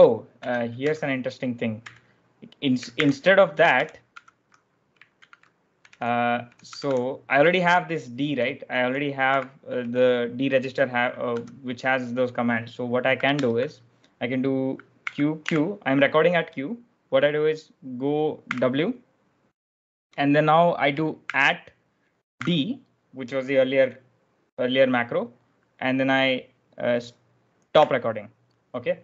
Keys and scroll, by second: 0.4 Escape, 0.7 u, 1.7 u, 2.9 ctrl+r, 3.6 shift+b, 4.0 shift+b, 5.1-6.7 typing, 9.2-10.2 typing, 11.2 b, 13.2 0, 14.9-15.3 typing, 18.4 w, 21.2 shift+2, 22.3 d, 27.6 q.